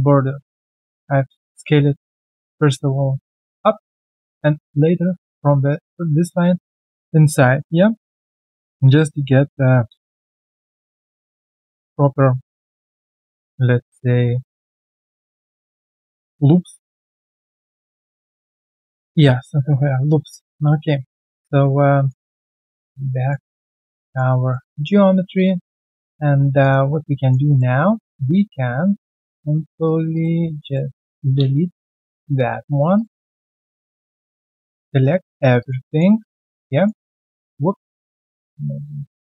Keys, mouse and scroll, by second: 0.3 alt+scroll down 1, 0.5 alt+middle click, 1.7 alt+middle click, 4.1 alt+middle click, 7.4 alt+middle click, 9.0 shift+click, 9.2 shift+double click, 9.8-10.2 scroll down 1, 11.2 alt+middle click, 12.4 alt+right click, 14.7 alt+middle click, 16.7 alt+middle click, 19.2-19.7 scroll down 1, 19.7 w, 20.1 alt+middle click, 21.8 typing, 22.3 alt+middle click, 22.5 alt+right click, 22.9 alt+middle click, 23.2 alt+right click, 23.4 alt+click, 23.6 alt+middle click, 23.8 alt+right click, 24.0 alt+click, 24.3 alt+middle click, 24.7 alt+click, 25.8-27.1 alt+scroll down 3, 26.6 alt+click, 27.1 alt+middle click, 27.4 alt+click, 27.8 right click, 30.6 shift+click, 30.8 shift+double click, 31.8 shift+d, 33.9 scroll down 1, 34.2 alt+click, 35.5 alt+click, 35.8 alt+middle click, 36.1 alt+right click, 36.5 alt+middle click, 36.7 alt+right click, 37.1 alt+click, 38.0 ctrl+click, 39.0 alt+click.